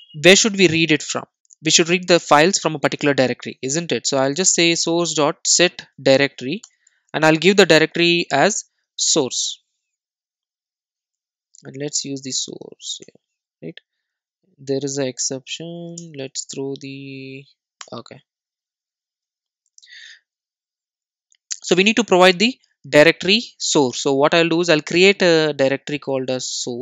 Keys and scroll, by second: 1.3 Return, 6.7 Return, 13.1 Return, 15.9 Return, 18.7 alt+Return.